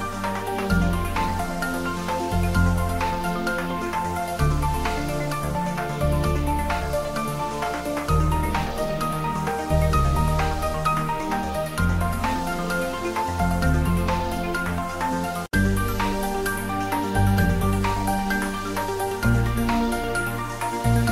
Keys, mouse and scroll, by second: 0.1 scroll down 1, 0.6 click, 1.5 2, 1.7 Return, 1.8 click, 2.4 2, 2.5 Return, 3.0 click, 3.8 2, 4.0 Return, 4.1 scroll up 1, 4.7 middle click, 5.4 middle click, 5.6 scroll down 1, 5.6 middle click, 6.2 click, 6.5-6.9 scroll up 1, 6.9 scroll down 1, 6.9 middle click, 7.8 scroll up 1, 7.9 scroll down 1, 8.2 shift+a, 8.5 click, 9.5 middle click, 9.6 g, 9.8 click, 10.0 g, 10.7 click, 10.9 middle click, 11.0 g, 11.7 click, 11.9 scroll up 1, 12.8 scroll down 1, 13.1 typing, 13.6 click, 14.6 click, 15.0 click, 18.3 scroll down 1, 18.4 scroll up 1, 18.5 scroll down 1, 18.6 scroll up 1, 18.8 scroll, 19.3 scroll down 1, 19.8 click.